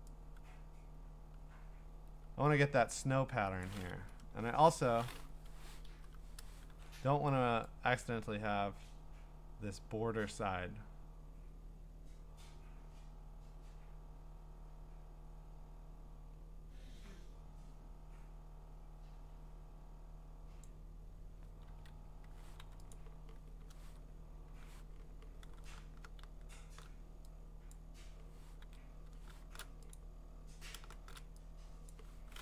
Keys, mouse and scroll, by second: 3.6 click, 4.3 BackSpace, 5.5 Escape, 5.9 alt+BackSpace, 6.7 ctrl+d, 20.6 click, 21.7 ctrl+z, 22.6 w, 22.9 click, 25.4 w, 25.8 w, 27.7 click, 28.6 ctrl+d, 29.4 w, 29.9 click, 30.9 w, 31.9 click.